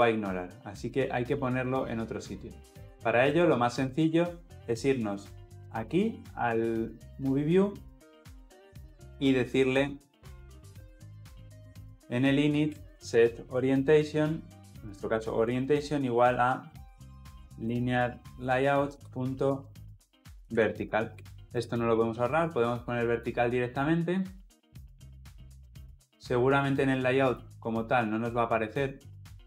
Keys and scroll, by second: 14.5 Return, 14.8 ctrl+p, 20.9 Return.